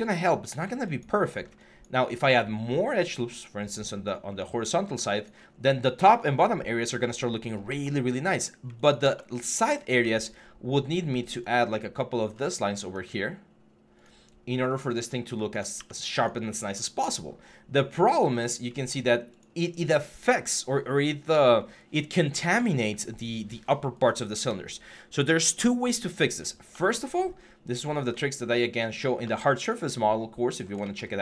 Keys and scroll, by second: 0.9 3, 14.8 3, 15.6 3.